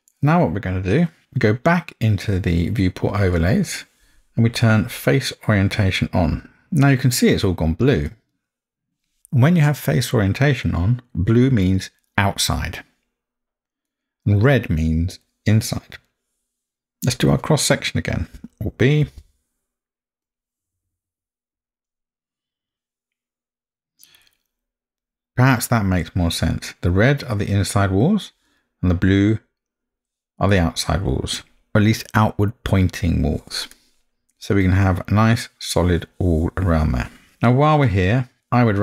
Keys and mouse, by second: 3.4-6.6 drag, 8.1-11.9 middle drag, 14.0-17.3 middle drag, 19.0 alt+b, 22.7-24.0 middle drag, 31.3 middle drag, 33.7-34.3 middle drag, 37.3 alt+b, 37.3-38.4 middle drag.